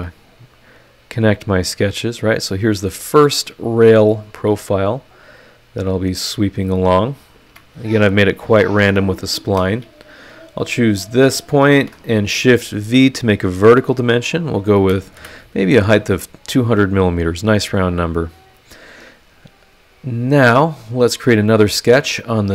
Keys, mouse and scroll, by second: 1.8 click, 2.2-2.5 scroll down 2, 2.9 click, 3.4 click, 3.7 click, 4.2 scroll down 2, 4.9 click, 5.3 click, 6.3 click, 7.5 Escape, 9.4 Escape, 10.4 click, 11.7 shift+v, 14.8 KP_2, 14.9 KP_0, 15.2 KP_Enter, 17.7 click, 19.3 click, 21.1 click, 21.7 scroll down 1.